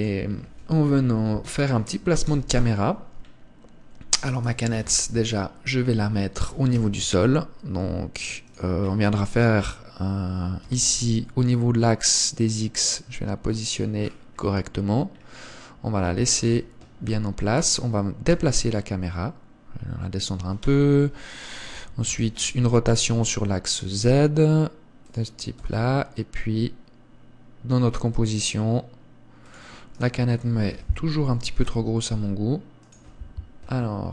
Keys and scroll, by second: 1.3 KP_1, 2.6 KP_0, 5.3 KP_1, 6.8 g, 11.0 g, 16.7 KP_0, 18.7 g, 21.0 g, 22.5 r, 31.1 KP_1, 32.0 s.